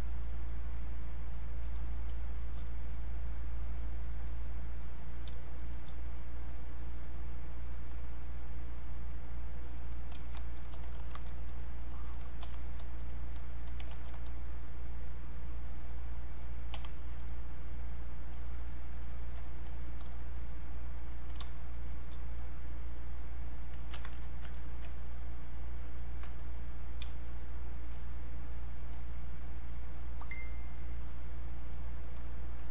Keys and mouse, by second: 1.7 space, 2.3 click, 5.3 space, 5.7 click, 5.8 space, 6.2 click, 10.9 ctrl+1, 11.4-13.9 drag, 13.9 ctrl+1, 14.3-17.1 drag, 20.4 shift+click, 21.5 space, 21.9 click, 22.0 space, 22.4 click, 24.0 ctrl+z, 24.2 click, 24.6 ctrl+right click, 25.6-27.1 drag, 27.1 space, 27.3 click, 27.5 space, 28.4-32.7 drag.